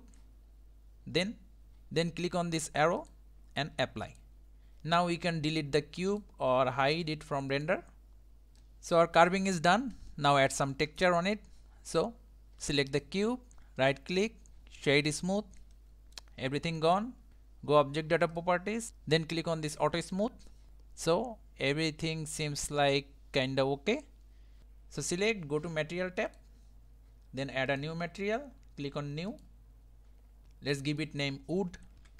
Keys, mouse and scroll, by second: 3.0-6.2 drag, 7.0 click, 7.5 click, 8.6-12.9 middle drag, 12.9 click, 13.8-15.7 right drag, 15.7-17.3 middle drag, 18.3 click, 20.0 click, 20.7-22.8 middle drag, 24.6 click, 26.3 click, 27.8-30.9 drag, 30.9-32.0 drag, 32.0 o.